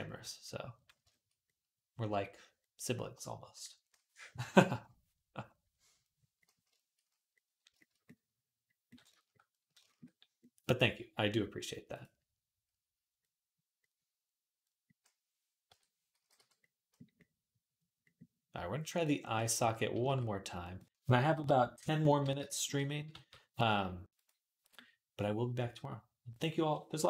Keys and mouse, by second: 15.5 l, 16.0 x, 19.8 shift+d, 22.9 g.